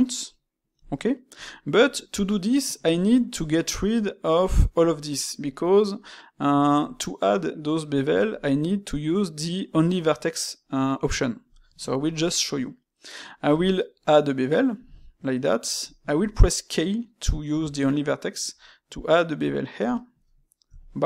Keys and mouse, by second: 0.8-4.4 shift+middle drag, 13.4 space.